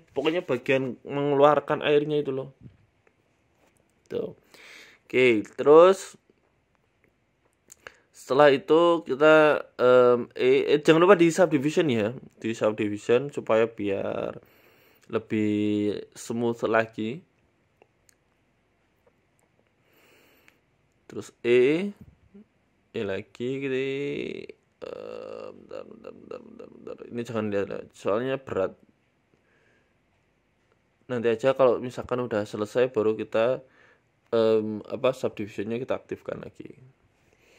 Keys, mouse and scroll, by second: 2.6 e, 4.2 ctrl+r, 15.2-15.8 scroll down 2, 15.8 scroll up 1, 15.9 scroll down 2, 16.1 g, 17.9 scroll up 3, 18.3 click, 19.4 r, 20.1 g, 22.1 e, 24.2 r, 27.1 click, 28.1 g, 28.8 click, 29.8 click, 30.5 a, 30.7 a, 31.0 alt+shift+Right, 32.2-34.7 typing, 35.8 click, 36.2 s, 37.4 click.